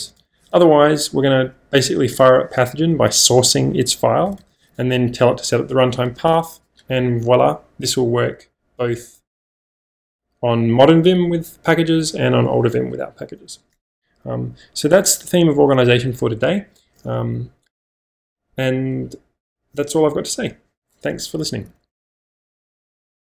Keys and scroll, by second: 0.0 Escape, 0.1 Escape, 0.3 j, 0.5 j, 0.7 j, 2.1 shift+v, 4.2 Escape, 4.4 Escape, 4.6 j.